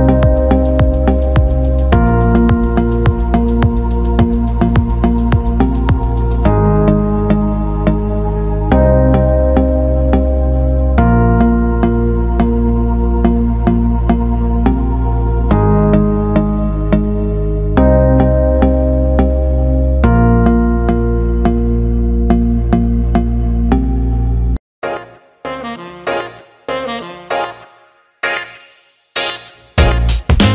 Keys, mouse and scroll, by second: 0.9-2.5 drag, 2.7 alt+shift+middle click, 3.8 click, 4.5 click, 5.2-6.8 drag, 7.3 click, 8.3-10.5 drag, 11.1-12.7 drag, 13.4-18.9 drag, 19.1 alt+shift+middle click, 20.5 alt+shift+middle click, 21.1 alt+middle click, 22.6 click, 23.7 click, 24.7 shift+click, 26.4 shift+click, 27.1-29.0 shift+drag.